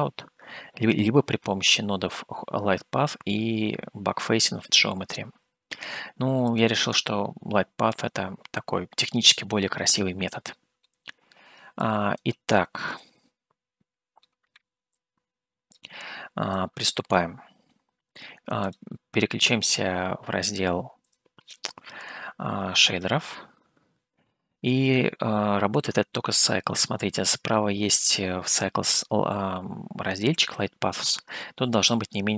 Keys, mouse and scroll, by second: 0.8 click, 6.4 click, 10.3 middle click, 11.8 click, 12.7-14.2 middle drag, 14.9 click, 16.5 click, 18.8 click, 21.1-24.3 drag.